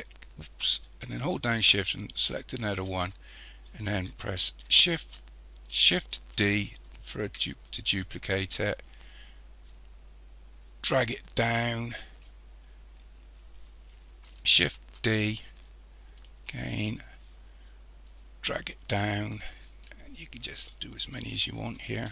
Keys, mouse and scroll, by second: 2.2 shift+click, 6.4 shift+d, 9.8 click, 13.0-15.0 scroll down 2, 15.0 shift+d, 18.1 click, 20.7-22.1 middle drag.